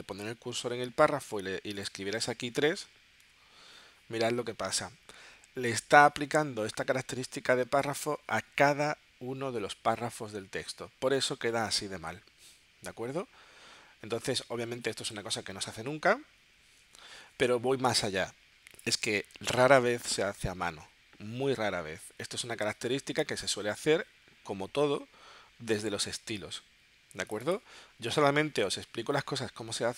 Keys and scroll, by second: 2.7 3.